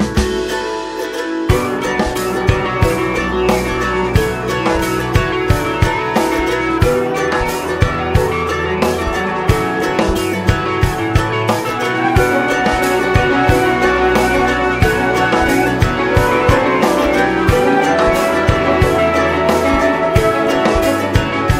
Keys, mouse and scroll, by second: 0.7-10.0 drag, 10.0 ctrl+s, 10.4-11.8 middle drag, 11.8 space, 12.3-14.5 middle drag, 17.0 middle click, 17.4 space, 18.3 middle click, 21.0-21.5 middle drag.